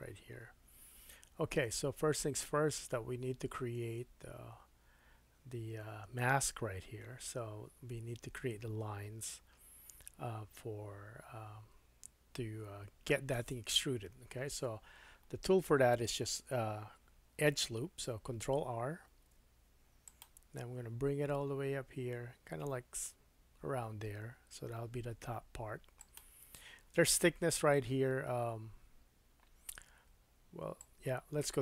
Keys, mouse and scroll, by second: 19.0 ctrl+r, 26.1-30.8 drag.